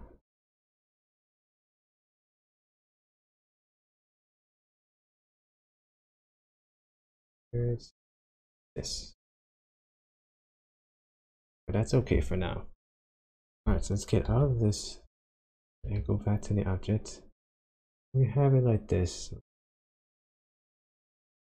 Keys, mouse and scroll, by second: 0.4 click, 0.8 g, 1.5 click, 2.4 click, 2.7 g, 5.0 click, 5.5 click, 5.8 g, 6.7 click, 7.1 click, 7.4 g, 8.5 click, 9.5 click, 9.9 g, 11.3 click, 14.3 shift+z, 15.8 Tab, 16.8-17.4 scroll down 1, 19.8 Tab, 20.4 Tab.